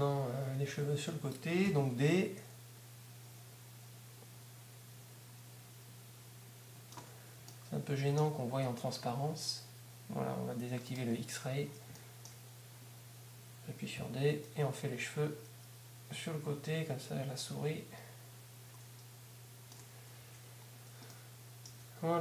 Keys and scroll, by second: 0.0 1, 2.0 d, 16.0 d, 20.2 Tab.